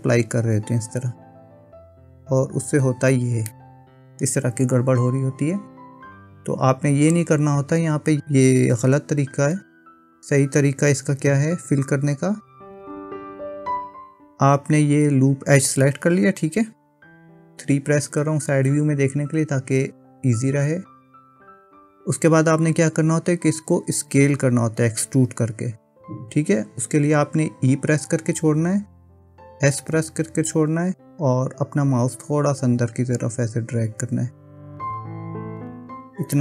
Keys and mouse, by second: 1.1 i, 2.3 i, 3.6 middle click, 8.9 ctrl+z, 9.5 ctrl+z, 10.1 ctrl+z, 10.6 ctrl+z, 11.2 ctrl+z, 11.8 ctrl+z, 12.8-14.0 middle drag, 17.0 KP_3, 28.2 e.